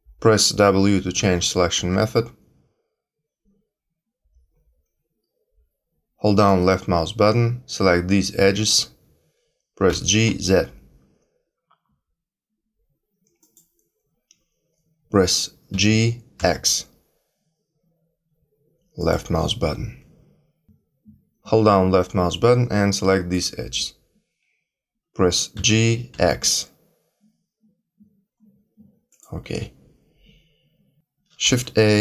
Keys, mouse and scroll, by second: 1.1 w, 1.7 w, 6.4 click, 9.8 g, 15.7 g, 22.3 click, 25.5 g, 31.4 shift+a.